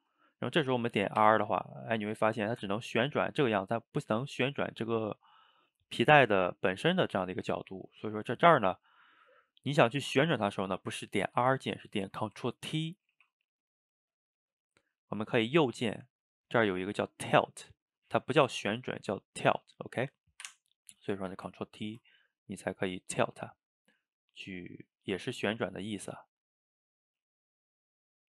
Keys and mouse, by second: 1.2 r, 5.1-7.1 middle drag, 7.1 shift+right click, 7.3-13.2 ctrl+shift+middle drag, 13.2 ctrl+t, 15.7-18.7 right drag, 21.2-21.9 shift+middle drag, 21.9 ctrl+t, 23.7-25.8 middle drag, 25.8 click, 26.0 g, 28.1 drag.